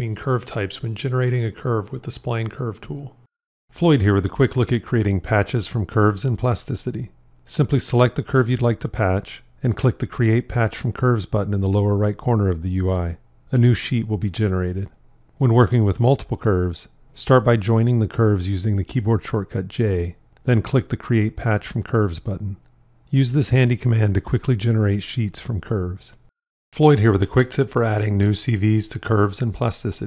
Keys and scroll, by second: 18.2 j, 24.3 j.